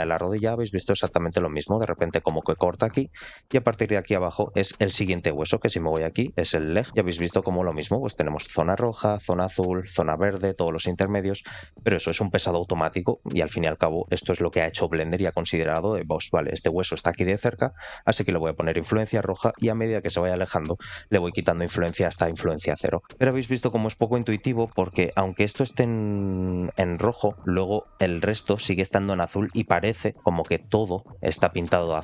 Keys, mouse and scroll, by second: 0.5 scroll up 2, 0.9 shift+middle click, 2.9-3.5 scroll down 3, 3.5 shift+middle click, 5.4 scroll down 2, 6.1-6.5 scroll down 1, 6.8 click, 6.9 scroll up 2, 7.2 shift+middle click, 7.5 scroll down 2, 10.3 shift+middle click, 11.3 middle click, 16.5 middle click, 18.0 middle click, 23.0 shift+middle click, 23.0 scroll down 3, 23.5 shift+middle click, 24.4 middle click, 24.8 shift+middle click, 26.9 shift+middle click, 27.3-29.0 scroll up 4, 29.0 scroll down 2, 29.3 shift+middle click, 29.8 scroll down 2, 31.5 scroll down 2, 31.6 shift+middle click.